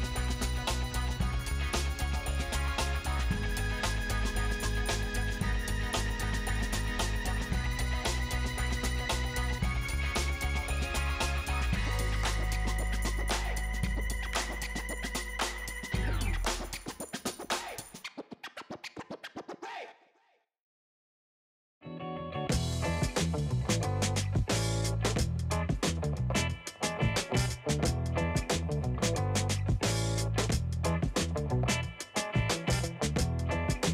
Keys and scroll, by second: 5.1 space, 32.2 ctrl+space.